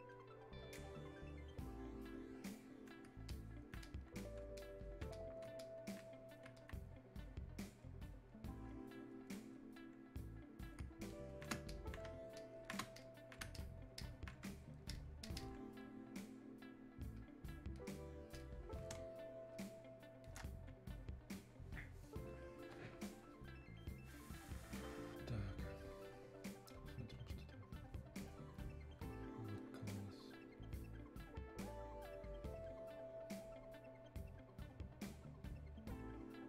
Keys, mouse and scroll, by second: 19.0 space, 19.6 click, 19.7 space.